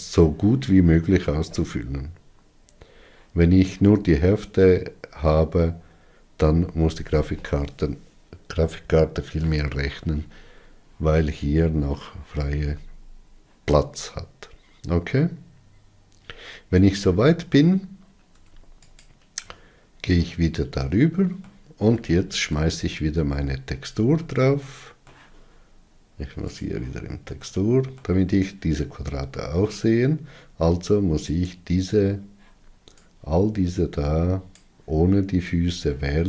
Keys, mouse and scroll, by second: 17.4 Tab, 19.0 Tab, 19.6 click, 20.9-23.7 middle drag, 23.7-24.1 scroll down 3, 24.6 alt+z, 25.3-27.2 middle drag, 27.2 click, 28.2-32.1 middle drag, 32.1 click, 35.2 click.